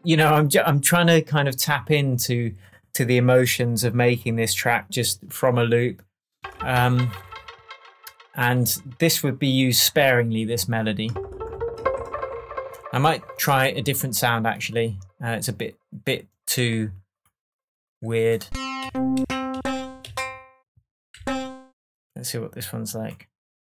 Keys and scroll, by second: 22.1 Down.